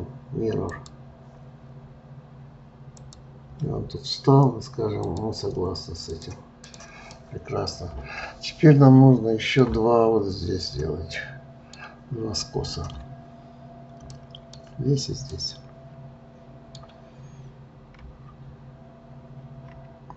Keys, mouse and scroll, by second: 0.7-3.7 drag, 5.1-6.7 drag, 7.1-10.1 middle drag, 11.1-18.4 middle drag.